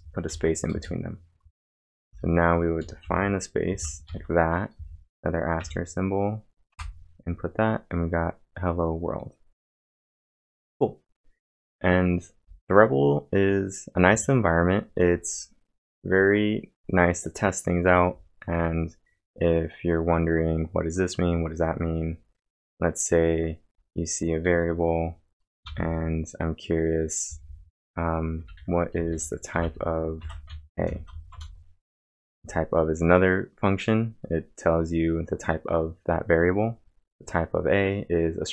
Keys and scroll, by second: 0.3-5.6 typing, 6.7 Return, 24.4 y, 25.4 space, 25.6 =, 28.1-30.9 typing, 31.3 Return.